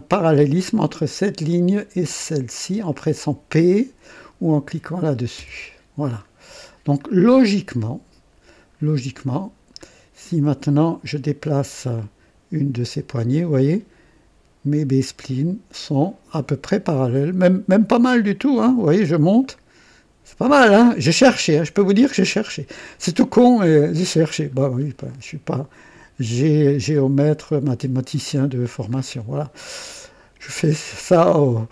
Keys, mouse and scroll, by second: 0.1 click, 2.9 click, 5.4 typing, 6.3-6.8 scroll down 2, 7.6 right click, 8.8-9.2 scroll down 1, 9.6-9.9 scroll down 1, 10.3 right click, 11.9-15.5 drag, 16.0-21.7 drag, 22.0 scroll up 1, 22.5 right click, 24.6-24.9 scroll down 1, 26.0-28.3 drag, 28.7 scroll down 1, 29.9 right click.